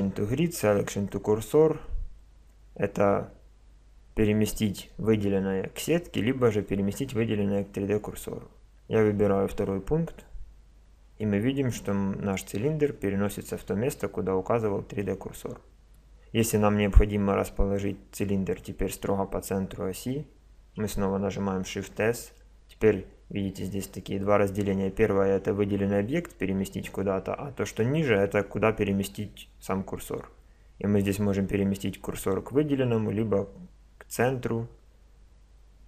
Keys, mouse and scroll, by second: 12.9-15.0 middle drag, 21.3 shift+s.